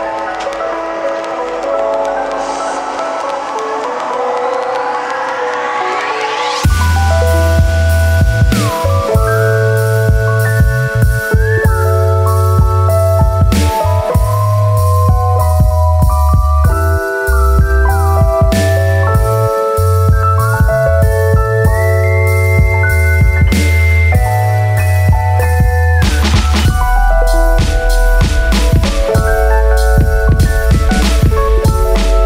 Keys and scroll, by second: 29.4 space, 31.0 super+z.